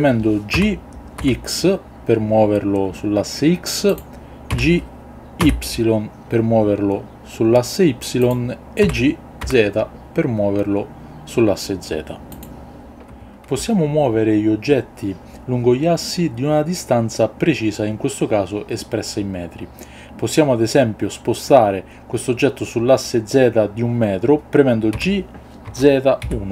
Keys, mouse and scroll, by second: 0.5 g, 1.1 x, 3.9 click, 5.4 y, 8.2 click, 9.4 z, 12.3 click, 24.9 g, 25.6 z, 26.2 KP_1.